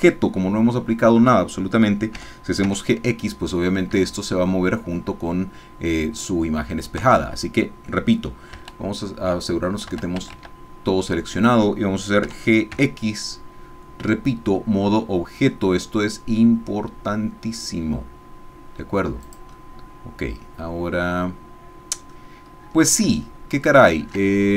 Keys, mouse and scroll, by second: 2.1 g, 2.7 x, 3.9 Escape, 7.0 Tab, 8.5 a, 9.9 a, 12.2 g, 12.7 x, 19.2 click, 19.7-22.2 middle drag, 23.3 ctrl+middle click, 24.3 ctrl+shift+middle click.